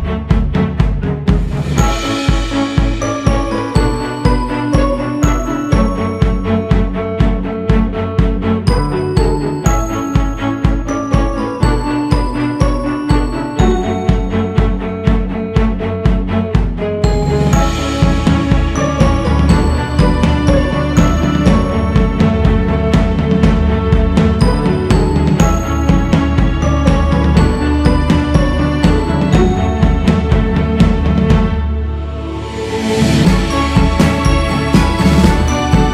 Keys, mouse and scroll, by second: 0.4-1.9 drag, 1.9 shift+c, 2.4 f, 6.1-7.7 scroll up 1, 7.7 scroll up 1, 8.0-11.0 drag, 11.7-14.7 drag, 15.1-15.6 scroll down 1, 15.6 ctrl+z, 16.0 ctrl+z, 16.8-17.7 scroll up 1, 17.7-20.7 drag, 24.2-27.8 drag, 29.5-35.9 drag.